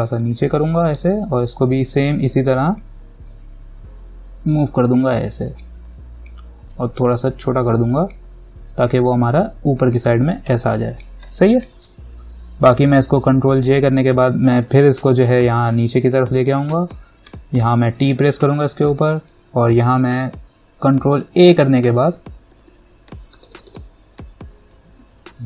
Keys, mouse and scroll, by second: 7.3-10.7 alt+drag, 12.0 ctrl+-, 14.3-17.5 drag, 17.5 t, 17.8 click, 21.4 ctrl+a, 22.0-23.4 typing, 25.2-25.4 typing.